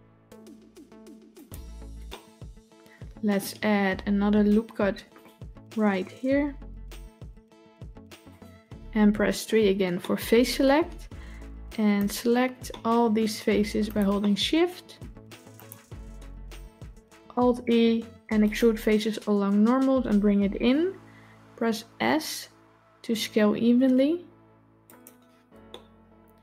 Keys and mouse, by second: 1.9-3.2 middle drag, 4.6 ctrl+r, 9.4 3, 9.9 middle click, 11.8 click, 12.5 middle click, 14.1 middle click, 15.4 shift+click, 17.1 alt+e, 25.6-26.4 middle drag.